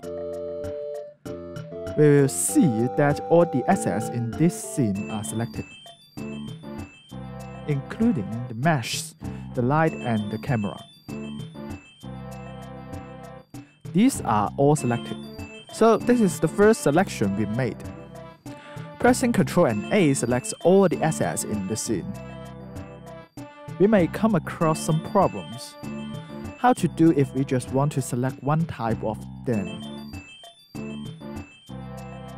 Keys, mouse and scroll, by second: 0.6 ctrl+a, 2.0 alt+click, 2.8 alt+right click, 4.5 alt+click, 9.6 scroll, 17.7 alt+right click, 19.9 alt+right click, 22.9 alt+right click.